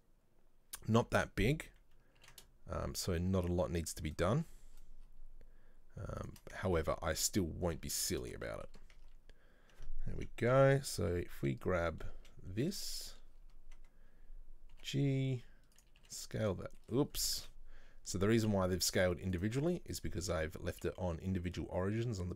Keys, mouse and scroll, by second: 2.3 ctrl+b, 6.6 scroll down 1, 6.8 Tab, 6.9 middle click, 7.3-7.8 scroll down 1, 7.8 middle click, 8.3 scroll down 1, 8.5 shift+middle click, 9.1 Tab, 10.7 a, 11.2 KP_3, 13.0 shift+middle click, 13.4-14.2 scroll down 3, 14.8 g, 16.9 shift+middle click, 17.1-17.5 scroll up 3, 17.5 ctrl+z, 18.5 s, 20.0-22.3 drag.